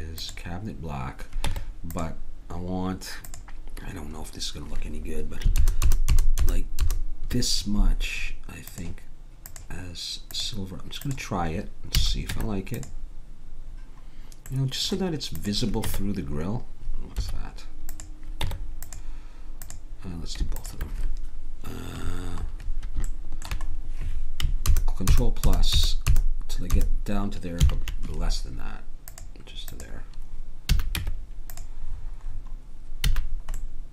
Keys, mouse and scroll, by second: 1.5 Tab, 5.6 ctrl+KP_Add, 10.5 click, 12.0 a, 12.3 Tab, 15.5 click, 15.8 Tab, 18.5 Tab, 22.1 click, 23.1-24.7 middle drag, 24.7 ctrl+KP_Add, 27.6 ctrl+KP_Subtract, 29.1-31.4 drag, 30.7 a, 31.0 Tab, 33.1 a.